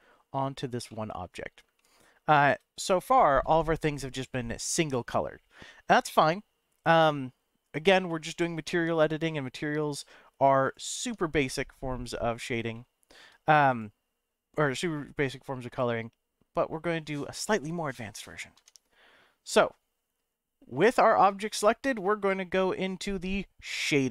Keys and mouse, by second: 0.9-1.3 middle drag, 1.7-2.2 shift+middle drag, 10.6 click, 11.0 Tab, 11.5 middle click, 12.7 shift+middle click, 13.8 click, 15.7 click, 18.6 Tab.